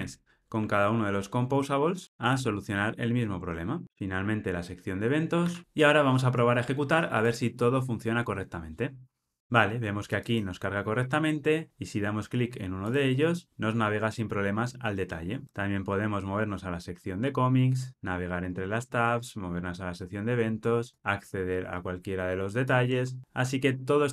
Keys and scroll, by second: 0.0 super+v, 3.8 ctrl+alt+o, 7.3 ctrl+r.